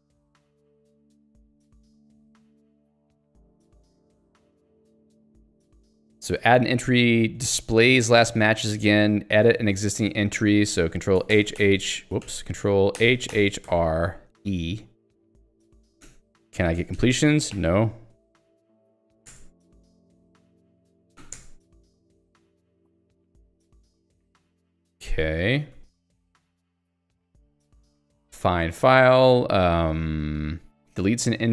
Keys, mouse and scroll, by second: 0.6-1.5 scroll down 1, 3.9-4.4 scroll down 1, 4.4 scroll up 1, 4.9 scroll down 1, 10.5 alt+x, 10.9 ctrl+g, 11.4 h, 12.3 ctrl+g, 13.7-20.8 typing, 21.4 Return, 22.7 ctrl+g, 23.6 ctrl+s, 25.3 ctrl+alt+', 28.4 j, 30.2 l.